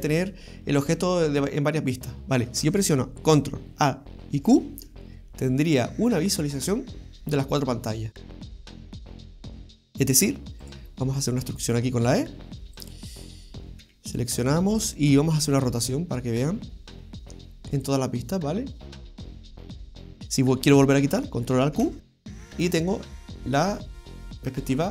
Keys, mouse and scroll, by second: 4.5 ctrl+alt+q, 8.3 right click, 10.7 right click, 12.1 e, 13.8 a, 15.8 r, 20.2 scroll down 2, 21.8 ctrl+alt+q, 22.7 scroll up 2, 23.1-23.6 scroll down 2, 23.4 scroll up 1, 23.6 shift+middle click, 24.4-24.9 scroll down 2.